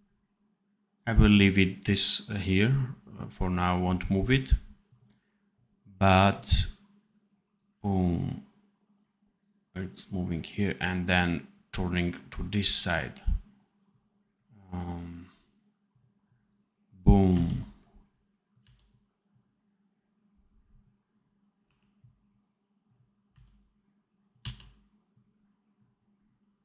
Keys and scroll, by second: 17.2 c, 18.5 v, 21.5 1, 23.2 c, 24.3 v.